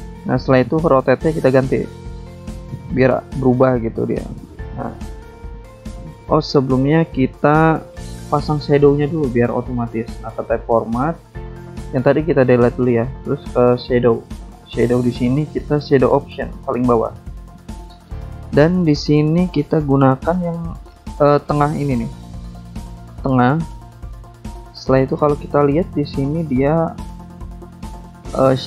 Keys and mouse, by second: 0.7 click, 1.5 click, 3.6 click, 4.2 click, 6.0 click, 6.9 click, 7.9 shift+click, 8.9 click, 10.2 BackSpace, 11.0 BackSpace, 11.5 click, 11.8 BackSpace, 12.4 click, 13.6 click, 15.9 click, 19.6 click, 21.7 click, 23.7 click, 25.8 click, 26.2 alt+Tab, 26.9 click, 27.8 click.